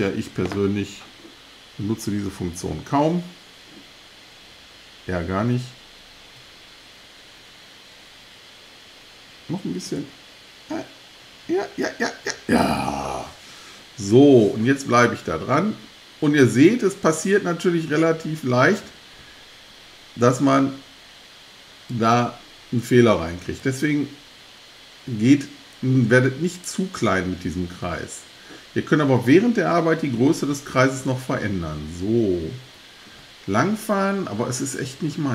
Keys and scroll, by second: 1.9 Left, 4.5 Left, 9.3 Left, 10.7 Left, 11.5 Left, 11.8 Left.